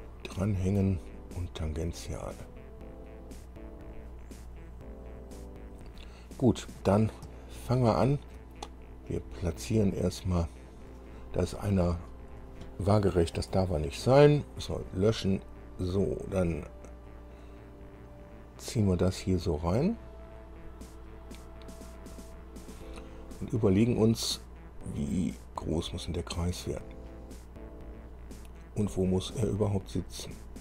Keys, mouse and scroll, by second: 4.1-6.2 drag, 7.6-8.7 shift+middle drag, 9.3-11.1 drag, 12.6 click, 13.7 Delete, 17.6-26.0 drag, 26.9-30.6 drag.